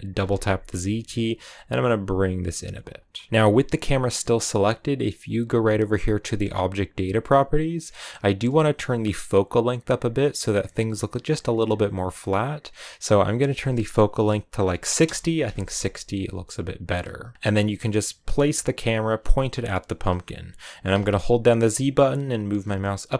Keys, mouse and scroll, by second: 2.5 g, 8.8-16.1 drag, 16.1 g, 17.3 g, 18.3 g, 22.8 z.